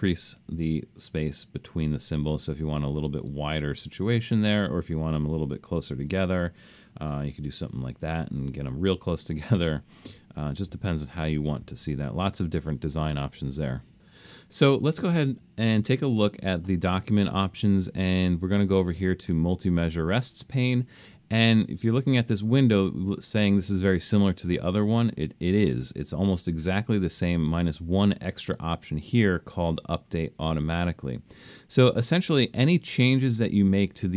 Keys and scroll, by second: 0.4 2, 6.7-7.8 typing, 10.6 super+z, 11.0 super+z, 15.9 alt+super+a.